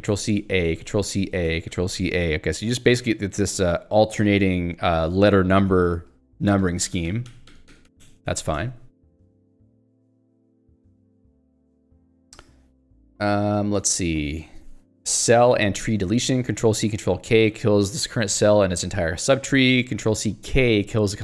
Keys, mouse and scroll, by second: 3.1 k, 3.7 h, 5.3-8.2 typing, 8.5 ctrl+s, 8.8 Escape, 16.1-17.7 typing, 21.0 j.